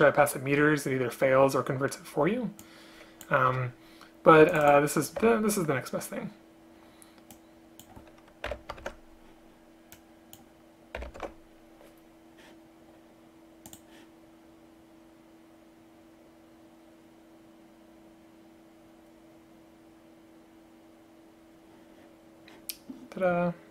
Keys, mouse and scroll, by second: 3.6 BackSpace, 5.3 ctrl+c, 8.9 ctrl+v, 11.3 ctrl+v.